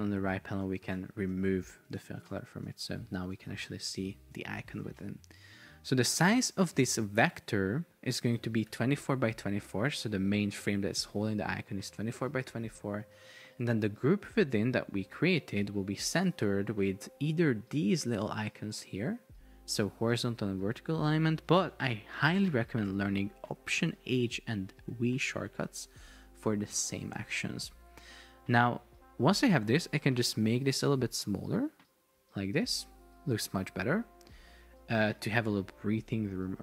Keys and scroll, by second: 8.9 Return, 24.0 alt+h, 25.0 alt+v, 25.6 alt+h, 25.9 alt+v, 35.0 alt+v.